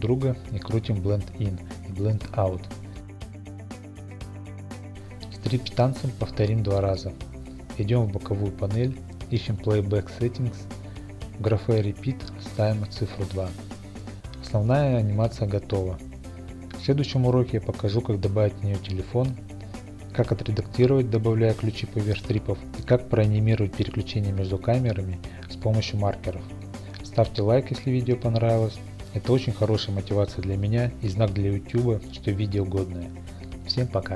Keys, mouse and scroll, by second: 0.0 click, 0.5 click, 0.8 n, 1.2 scroll, 1.5-2.0 drag, 2.0 middle click, 2.2 click, 2.5 0, 2.7 Return, 3.6 click, 3.8 click, 4.3 click, 5.9 click, 5.9 scroll, 6.2 middle click, 6.4 click, 7.3 middle click, 7.4 middle click, 8.1 middle click, 9.3 click, 10.0 2, 10.4 Return, 11.0-12.1 scroll, 13.3 click, 14.0 click, 14.3 typing, 14.8 Return, 16.4 Home.